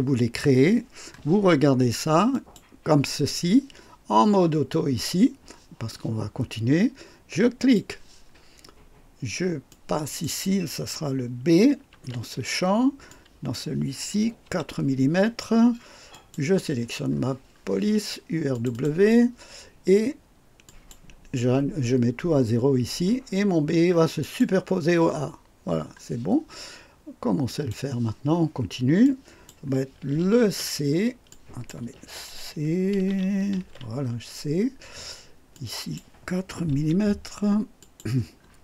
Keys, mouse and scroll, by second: 2.3 click, 7.6 click, 9.7 click, 11.9 shift+b, 13.1 click, 14.5 KP_4, 16.1 click, 17.1-17.8 scroll down 2, 18.5 click, 20.7 click, 24.2 click, 27.5 click, 29.0 click, 30.4 ctrl+c, 31.3 click, 32.0 ctrl+c, 33.6 shift+c, 35.5 click, 36.7 KP_4, 37.8 click, 38.3-38.6 scroll down 1.